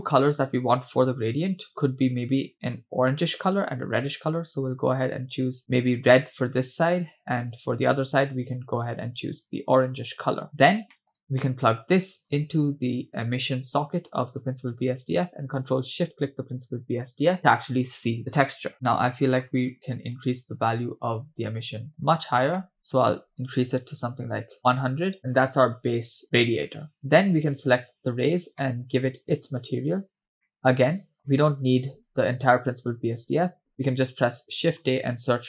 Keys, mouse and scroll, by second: 1.6 click, 7.4 click, 8.1 click, 10.5-10.9 scroll down 2, 11.0 middle click, 12.3-13.6 drag, 14.4 click, 16.0 ctrl+shift+click, 18.7 middle click, 18.8-20.1 scroll up 2, 20.2-22.2 drag, 22.9-24.8 drag, 24.6 0, 25.2 scroll down 3, 25.3-26.2 scroll up 6, 26.2-26.6 scroll down 1, 26.9 scroll down 3, 27.0-27.5 scroll up 1, 27.6 click, 28.6 middle click, 30.0-30.4 scroll down 2, 30.5 middle click, 31.3 scroll down 1, 31.3 middle click, 32.1 drag, 33.5 x, 33.7 shift+a.